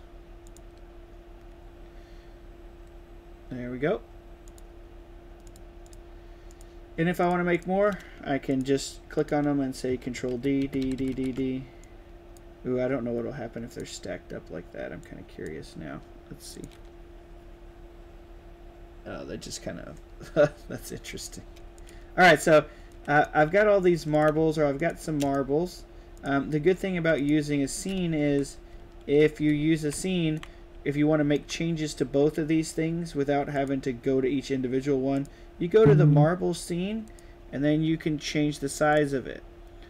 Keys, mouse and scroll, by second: 0.4 click, 4.4 click, 5.3 click, 5.8 click, 6.4 click, 7.1 drag, 7.5 click, 8.4 click, 9.1 click, 9.9 ctrl+d, 10.2 ctrl+d, 10.5 ctrl+d, 10.7 ctrl+d, 10.9 ctrl+d, 11.0 ctrl+d, 13.6 click, 14.9-15.3 drag, 16.5 drag, 21.7 click, 22.8-24.0 right drag, 24.0 drag, 24.7 shift+click, 25.2 right click, 26.1 click, 27.1 click, 27.4-31.3 right drag, 27.6-29.5 typing, 30.7 w, 33.5 click, 35.1 click, 36.9 click, 38.8 click.